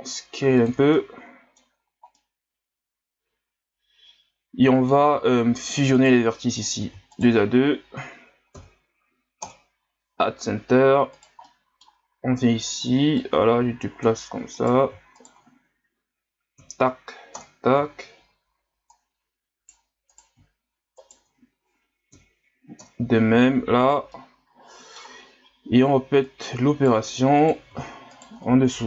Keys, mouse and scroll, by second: 0.9-1.7 middle drag, 1.7-2.2 scroll up 3, 2.2-5.3 middle drag, 5.3 ctrl+scroll down 1, 6.0 right click, 6.3 middle click, 7.1-8.5 shift+right drag, 8.5 m, 11.1 right click, 11.4-13.2 middle drag, 13.2-14.6 drag, 14.6-16.6 right drag, 16.6 m, 18.9 right click, 20.1 right click, 21.0 shift+right click, 22.1 m, 23.8 scroll down 2, 24.1-25.3 middle drag, 25.3-26.2 scroll up 1, 26.2-27.5 right drag, 28.1 shift+right click.